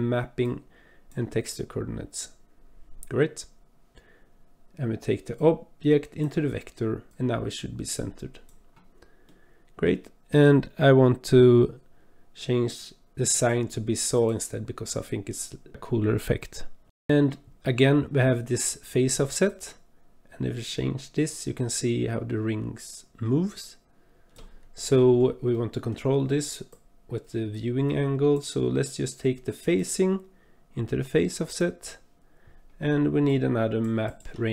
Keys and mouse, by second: 5.4-6.3 drag, 7.1-8.5 drag, 9.3 click, 13.2-13.6 drag, 16.6 click, 19.5-24.3 drag, 25.5 click, 26.7 click, 26.8-28.4 drag, 29.8-31.6 drag, 33.3 click, 34.0 click.